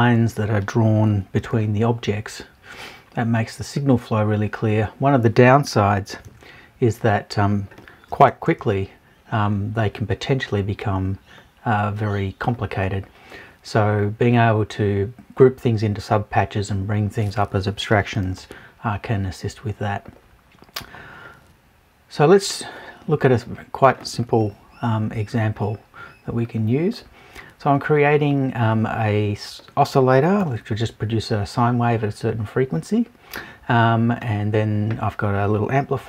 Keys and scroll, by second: 24.4 Left.